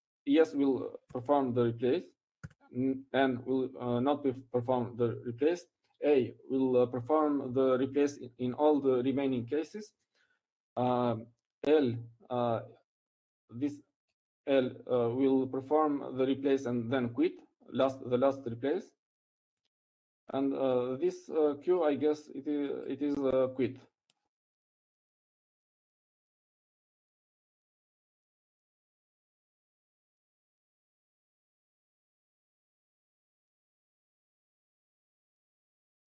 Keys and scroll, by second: 6.1-6.8 typing, 27.3 q.